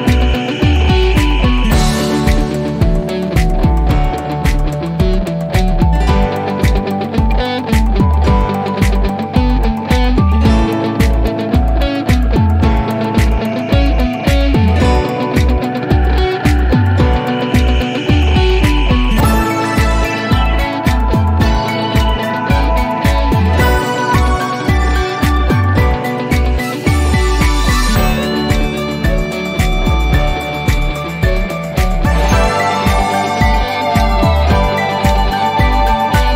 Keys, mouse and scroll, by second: 2.2 click, 3.1 scroll up 1, 5.3 scroll down 1.